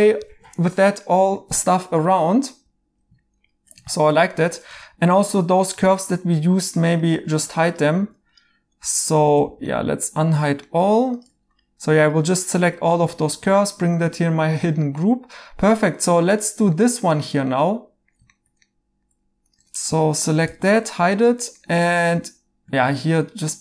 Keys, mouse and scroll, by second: 0.4 2, 1.2 right click, 5.8 ctrl+g, 9.1 Tab, 9.5 alt+h, 9.6 right click, 10.9 2, 19.5 Tab, 21.6 Tab, 21.6 right click, 22.8 a.